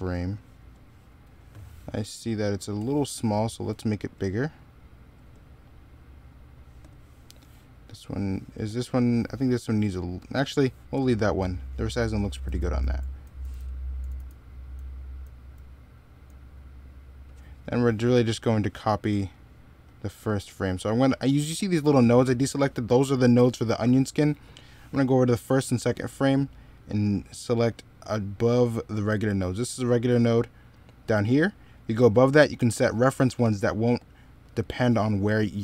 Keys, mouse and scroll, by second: 12.2 z, 12.6 x, 13.8 z, 14.6 x, 35.5 middle click.